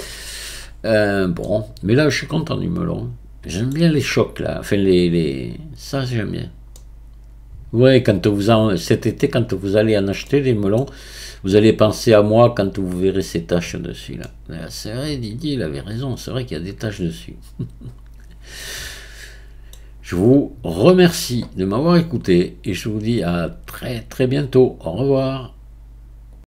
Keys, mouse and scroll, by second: 0.8-1.1 scroll up 2, 1.5-17.3 middle drag, 20.5-21.1 scroll down 1, 23.9-26.5 scroll down 1.